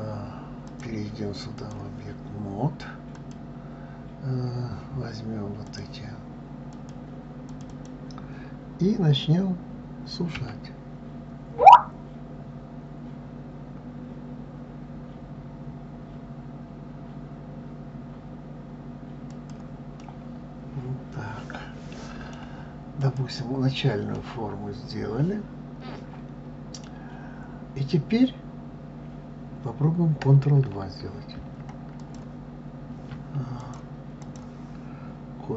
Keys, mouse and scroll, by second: 0.6-3.3 drag, 5.6 click, 6.7 click, 7.5 click, 7.7 click, 10.3 s, 20.0-23.0 middle drag, 23.0 click, 24.1-27.2 middle drag, 31.3 ctrl+2, 32.0 ctrl+click, 33.6-35.5 drag.